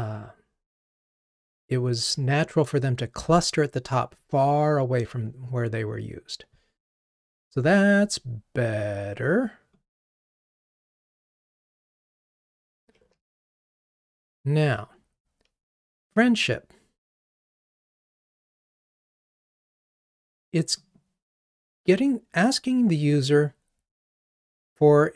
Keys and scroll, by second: 13.2 ctrl+r.